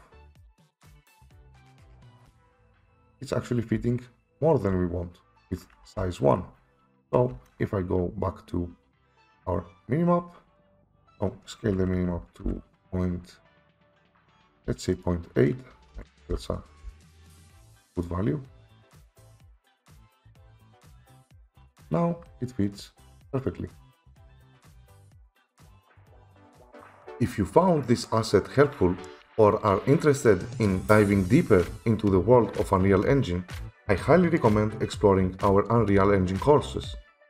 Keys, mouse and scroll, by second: 0.7 right click, 1.3 right click, 1.7-6.6 typing, 7.3 Escape, 8.9 typing, 9.3 click, 10.7 click, 10.8 click, 10.8 1, 11.1 click, 12.4 typing, 14.5 8, 15.0 click, 15.7-16.4 typing, 16.8 Return, 18.0 click, 19.4 click, 19.8 click, 20.5 click, 21.9 click, 22.3-23.3 w, 23.3-23.9 a, 26.2 click, 26.5-27.3 w.